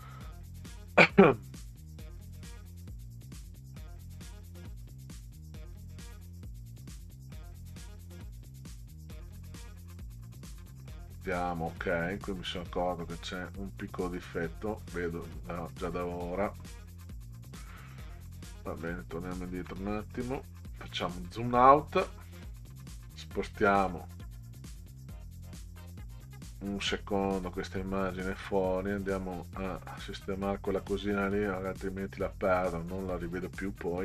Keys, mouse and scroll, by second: 11.2 click, 15.9-16.5 middle drag, 18.5-18.8 ctrl+scroll down 4, 18.8 ctrl+scroll up 2, 19.3-19.7 ctrl+scroll down 2, 19.9-20.3 scroll down 2, 21.1-21.5 ctrl+scroll down 2, 23.3-23.9 drag, 24.3 click, 25.0-25.9 drag, 28.7-29.2 ctrl+scroll up 2, 30.7-31.3 ctrl+scroll up 2, 32.3 ctrl+scroll up 2.